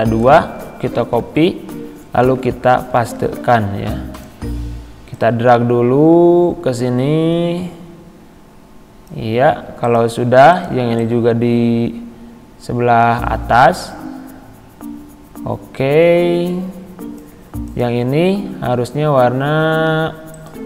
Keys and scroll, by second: 0.7 ctrl+c, 3.2 ctrl+v.